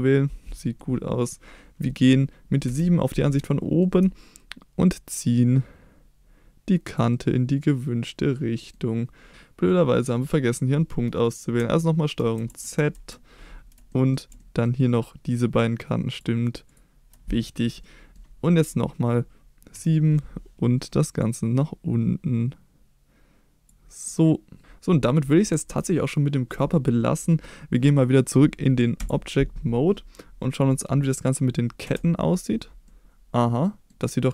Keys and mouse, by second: 0.6 middle click, 2.6 KP_7, 3.4-3.8 shift+middle drag, 4.9-6.9 drag, 7.1-8.7 middle drag, 9.6 middle click, 12.1 ctrl+z, 12.7 ctrl+z, 13.9 middle click, 14.4 shift+middle click, 16.6 shift+click, 17.8 middle click, 19.7 KP_7, 21.2-23.6 drag, 24.0 middle click, 26.0-26.5 shift+middle drag, 29.0 Tab, 31.9 KP_Divide, 32.9-33.9 middle drag.